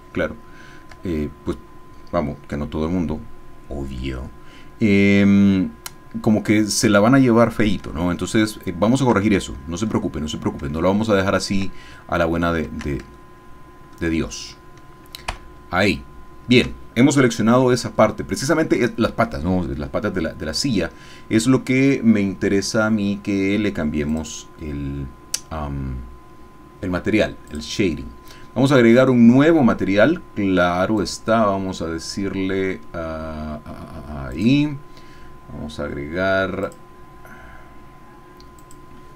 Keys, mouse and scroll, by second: 0.0-1.0 ctrl+shift+middle drag, 8.0 ctrl+click, 8.0-9.3 ctrl+middle drag, 9.4 ctrl+shift+click, 10.1 shift+middle click, 10.8 shift+middle click, 13.3 shift+click, 15.3 ctrl+KP_Add, 20.5 click, 24.1 click, 27.5 click, 31.0 click, 34.3-35.9 drag, 36.6 click, 38.6 click.